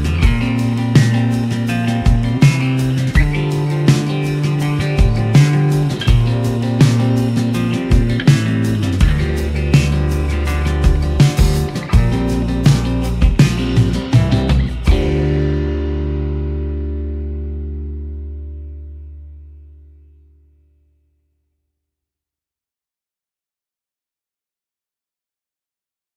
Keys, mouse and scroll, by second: 0.1 g, 0.8 click, 1.1-2.6 drag, 2.8 click, 5.6-5.9 shift+drag, 5.9 shift+middle click, 7.3 s, 9.4 click, 10.4 click, 12.6 s, 13.2 click, 13.6 click, 13.8 s, 14.7 g, 17.8 click, 18.5-19.2 drag.